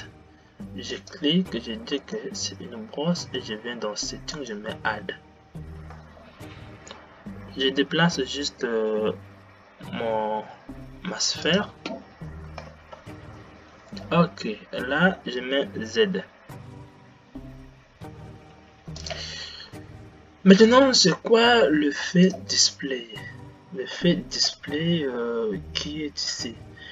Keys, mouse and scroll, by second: 8.3 g, 13.3 Left, 15.9 g, 23.3 click.